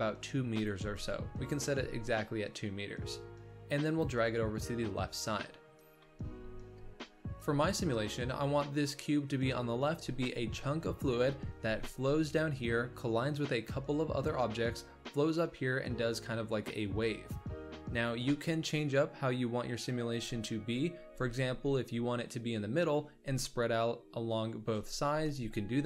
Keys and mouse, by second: 0.7 click, 1.7 g, 4.3-5.7 middle drag, 6.0 z, 7.7 middle click, 21.0 g.